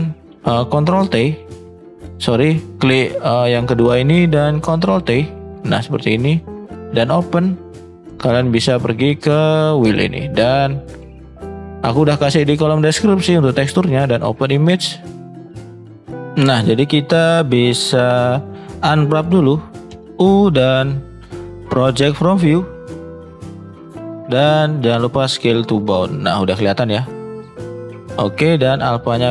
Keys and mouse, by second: 1.3 ctrl+t, 4.9 ctrl+t, 5.8-7.9 drag.